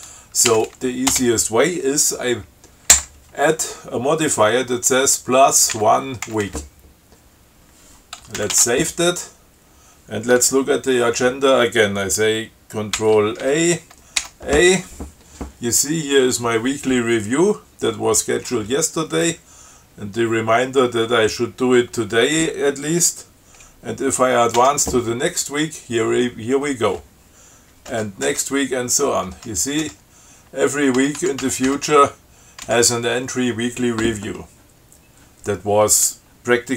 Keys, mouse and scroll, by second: 0.8 Left, 1.3 space, 6.0 1, 6.5 w, 8.7 ctrl+x, 8.8 ctrl+s, 13.2 ctrl+c, 13.7 ctrl+a, 14.4 a, 24.8 f, 28.2 f, 29.6 f, 31.2 b, 32.9 b.